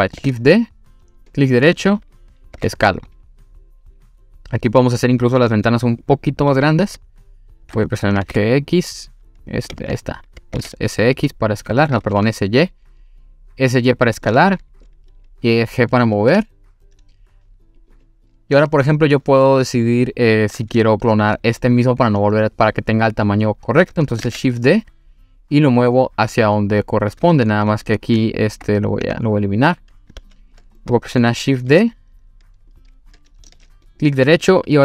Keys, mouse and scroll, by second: 0.2 shift+d, 1.3-2.3 right drag, 2.6 s, 6.0 click, 6.5 g, 6.5 z, 7.8 click, 8.2 g, 8.2 x, 9.5 click, 9.8 ctrl+z, 10.6 s, 10.6 x, 11.8 click, 12.1 s, 12.2 y, 14.3 click, 16.2 g, 17.8 click, 24.2 shift+d, 25.5 click, 25.9-27.5 middle drag, 29.1 Delete, 30.2 ctrl+z, 30.8 middle click, 31.7 s, 32.7 click, 33.5 shift+d, 33.9 right click.